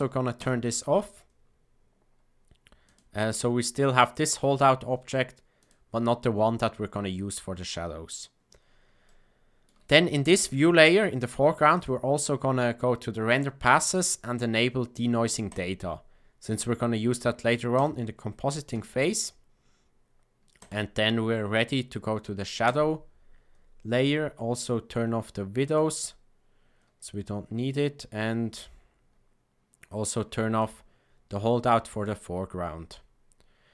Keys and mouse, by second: 0.3 click, 2.8 click, 5.5 click, 9.0 shift+middle click, 11.7 click, 15.4 click, 20.5-22.8 drag, 25.6 click, 30.5 click, 31.9 click.